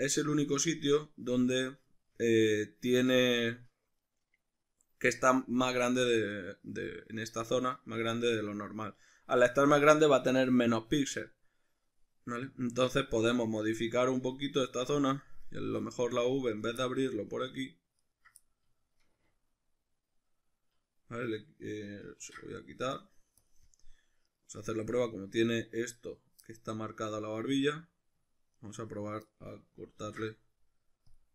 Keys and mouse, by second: 14.6 Tab, 16.6 right click, 16.8-18.0 middle drag, 18.0 ctrl+right click, 18.4-24.3 middle drag, 22.2 ctrl+e, 24.3 right click, 24.6-28.7 middle drag, 28.5 ctrl+right click, 29.3-31.3 middle drag, 30.0 ctrl+e.